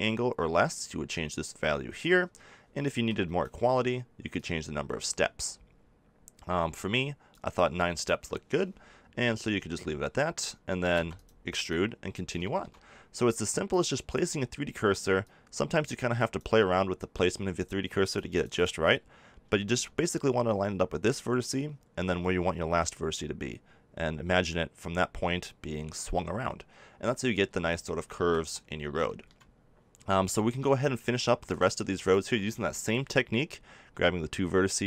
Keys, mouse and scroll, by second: 0.8 click, 4.3-5.9 middle drag, 5.9 click, 8.0-9.7 drag, 10.9 e, 11.2-14.3 drag, 20.0 click, 20.5-27.4 middle drag, 27.4 z, 28.1 a, 28.3 Tab, 29.9 Tab, 30.6 middle click, 31.4-33.0 right drag, 33.7 middle click.